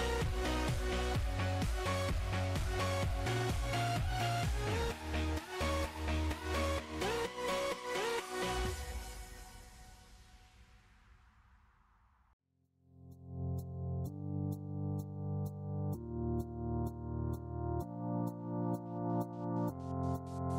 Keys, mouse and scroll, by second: 1.8-3.1 drag, 3.1 s, 3.6 ctrl+KP_0, 4.0-5.1 drag, 5.3 click, 6.1-7.1 drag, 7.8-8.8 drag, 9.3 click, 10.1 KP_0, 10.3 middle drag, 10.6 click, 10.9 middle drag, 11.1 click, 11.3 click, 11.4 s, 11.8-12.3 scroll down 4, 12.3 click, 12.5-13.5 drag, 14.2 click, 14.3-15.1 middle drag, 15.1 click, 15.7 middle click, 15.8 click, 15.9 shift+a, 17.3 click, 17.7 s, 18.1 KP_7, 18.3-18.6 scroll down 2, 18.6 r.